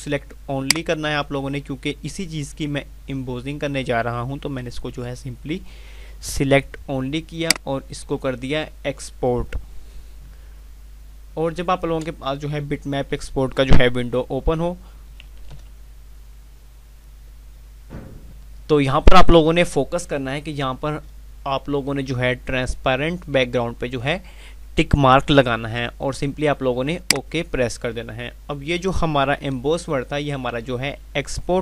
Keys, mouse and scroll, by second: 0.5 click, 7.3 click, 30.0 F5.